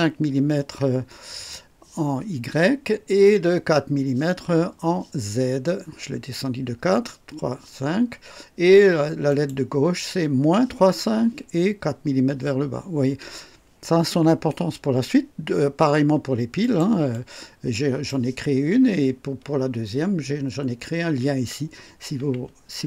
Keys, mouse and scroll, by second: 9.3 click, 16.6 click, 17.1-18.3 drag, 22.7 alt+scroll up 2.